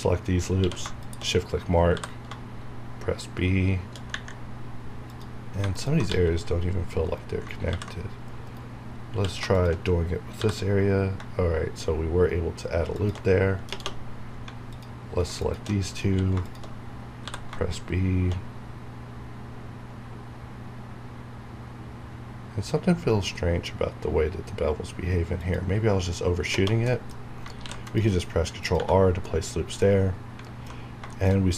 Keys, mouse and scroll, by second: 0.6 q, 1.0 shift+click, 1.9 b, 5.1 click, 6.1 g, 7.0 right click, 7.7 ctrl+b, 8.4 right click, 9.1 q, 9.5 shift+click, 10.4 b, 12.9 shift+click, 13.4 scroll down 1, 14.1 scroll down 1, 14.7 alt+click, 16.0 q, 16.4 click, 17.2 b, 25.4 click, 26.9 middle click, 27.2 scroll up 1, 27.6 ctrl+r, 27.8 ctrl+click, 28.7 Tab, 29.0 scroll down 1, 29.8 middle click, 30.8 scroll down 1, 31.1 shift+middle click.